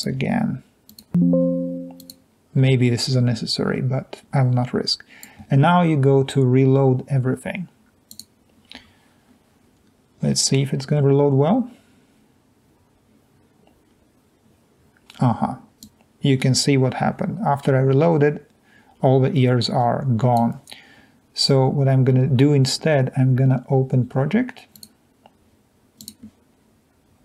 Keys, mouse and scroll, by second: 0.9 click, 3.8-4.2 scroll down 2, 4.2 click.